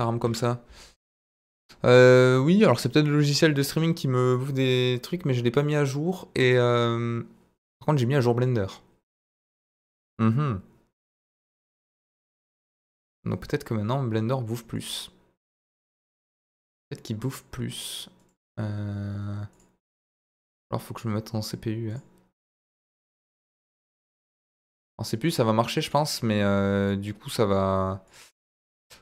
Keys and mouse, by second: 0.2 KP_Divide, 1.1 click, 5.6-8.4 middle drag, 12.0 click, 12.4 click, 18.2 click, 19.6-20.5 drag, 21.9 click, 23.0-24.0 middle drag, 25.0-25.9 middle drag.